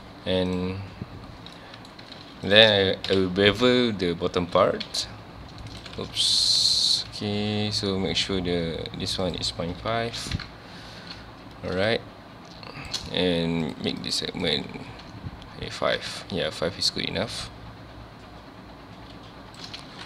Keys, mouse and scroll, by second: 0.5 click, 1.6-2.0 middle drag, 2.0 Tab, 2.2 3, 2.5 click, 3.1 KP_1, 3.7 scroll up 1, 4.8 ctrl+b, 5.8 right click, 6.2 ctrl+b, 6.7 click, 9.3-10.4 drag, 10.4 KP_Enter, 11.9-19.2 shift+drag, 19.9 alt+a.